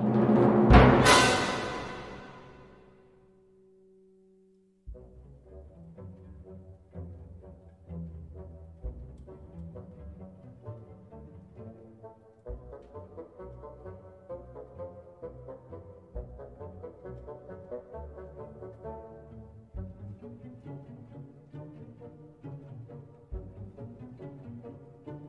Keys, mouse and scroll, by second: 0.8 click, 3.0 click, 5.1 click, 6.7 click, 9.0 click, 11.3-16.6 drag, 17.6-22.2 drag, 24.2 click.